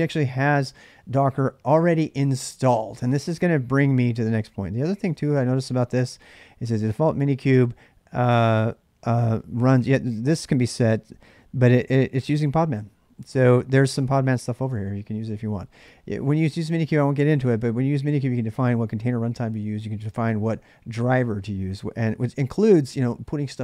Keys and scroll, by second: 0.1 ctrl+[, 0.2 k, 0.7 Return, 4.4-5.1 typing.